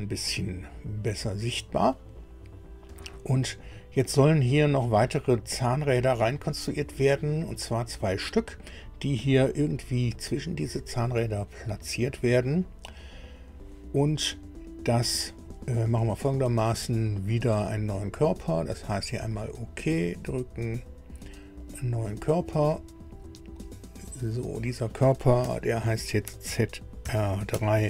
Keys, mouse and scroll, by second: 3.4 scroll down 2, 4.2 scroll up 2, 5.5 click, 19.2 click, 21.6 click, 22.5 scroll down 1, 23.1-23.5 scroll down 1, 23.7-24.3 scroll down 1, 24.5 click, 25.3 F2, 26.4 shift+t, 27.0 shift+r, 27.5 shift+3.